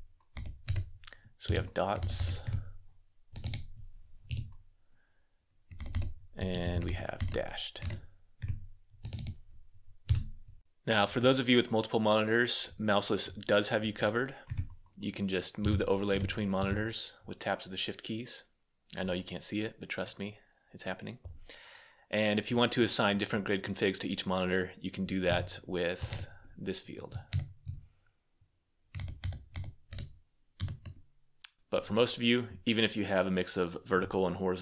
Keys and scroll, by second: 0.1 Down, 0.4 Return, 1.3 Tab, 1.7 Up, 1.9 Up, 2.9-4.1 typing, 5.5 Down, 5.7 Down, 6.4 Tab, 6.6 Down, 7.6 Return, 8.6-9.9 typing, 25.6-27.1 typing, 28.7 Down, 29.0 Down, 29.3 Down, 29.7 Return, 30.3 Escape.